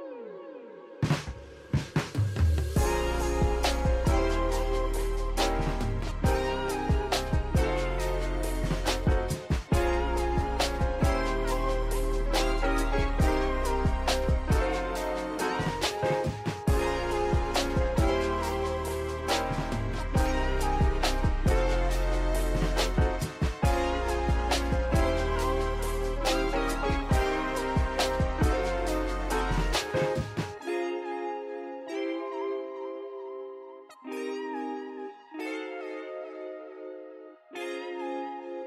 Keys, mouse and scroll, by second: 0.7-2.0 drag, 2.0 a, 2.8-4.0 drag, 4.0 scroll up 1, 4.5 3, 4.8 click, 5.3 alt+shift+click, 5.6 alt+shift+click, 6.5 alt+shift+click, 7.3 alt+shift+click, 8.9 alt+shift+click, 9.3 alt+shift+click, 9.9 alt+shift+click, 11.5 alt+shift+click, 11.8 alt+shift+click, 12.4 alt+shift+click, 14.7 click, 15.4 click, 17.5 click, 18.1 Tab, 18.9-19.5 scroll down 2, 19.5-20.2 shift+middle drag, 20.2 click, 21.8-30.7 drag, 31.0 click, 33.4 shift+middle click, 34.0 click, 35.1-37.3 drag, 37.5 click, 38.4 click.